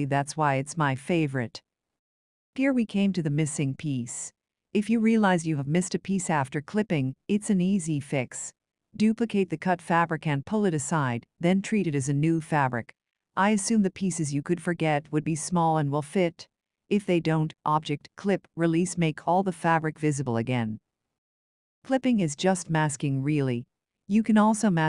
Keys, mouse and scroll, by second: 0.6 click, 2.2-2.6 ctrl+scroll, 3.5 click, 5.3 ctrl+d, 5.9 click, 9.0 click, 10.8 click, 12.7 ctrl+z, 13.6 click, 19.2 click, 20.9 shift+click, 24.6 click.